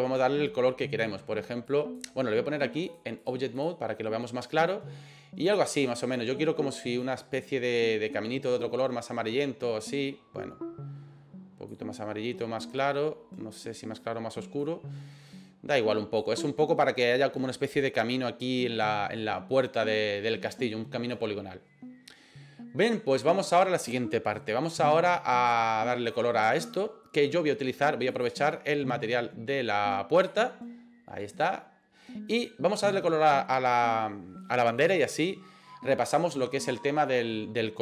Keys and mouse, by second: 2.8 click, 3.3 click, 25.9 right click, 28.3-30.4 drag, 31.4 right click, 32.4 right click.